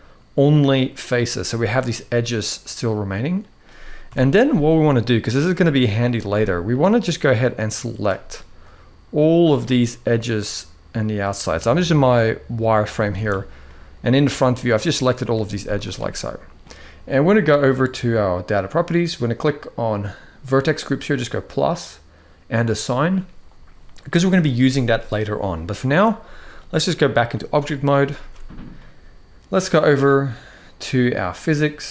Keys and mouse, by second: 0.9 middle click, 1.9-3.1 middle drag, 3.8 KP_1, 5.0 click, 6.0 z, 7.0 click, 8.4 shift+click, 9.9-10.9 shift+drag, 11.5-12.8 shift+drag, 13.4-15.0 middle drag, 15.3 z, 18.2 click, 20.9 click, 22.4 click, 24.4 middle click, 26.3-27.0 drag, 27.3 middle click, 27.9 ctrl+s.